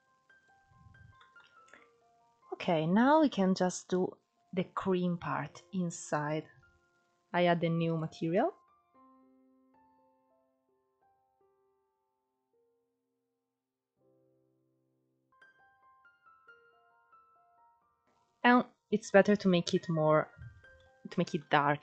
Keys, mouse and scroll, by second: 0.0-0.5 scroll down 4, 0.5-0.8 shift+middle drag, 0.8-1.4 scroll up 2, 1.4-2.3 scroll up 3, 2.3 click, 5.7-7.3 drag, 7.3-10.5 drag, 12.4 click, 18.3-19.0 shift+middle drag, 19.0-19.9 scroll up 1, 19.9-21.8 shift+middle drag.